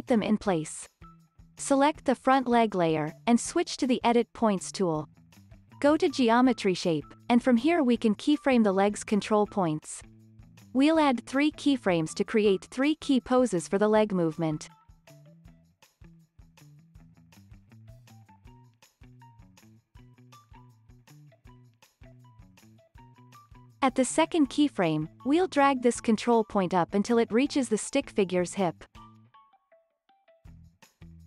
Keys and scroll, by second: 1.3 Tab, 2.5 Tab.